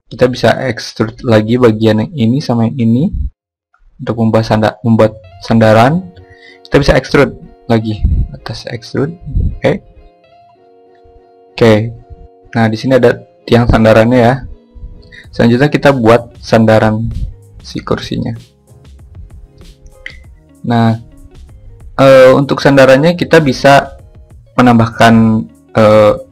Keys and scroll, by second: 5.8 e, 22.8 shift+a.